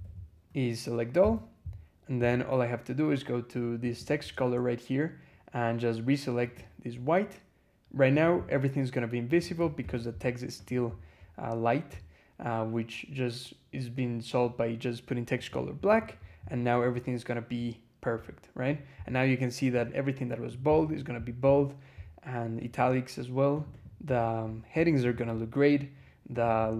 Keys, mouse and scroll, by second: 1.0 ctrl+a, 3.7 click, 6.3 click, 8.0 click, 9.2 click, 9.6 ctrl+a, 10.4 click, 15.2 click, 15.8 click, 16.3-17.4 scroll up 4, 17.5-17.8 scroll up 2, 18.1 scroll up 2, 19.6 click, 20.6 click, 22.4 click, 23.4 click, 24.9 click, 26.2 click.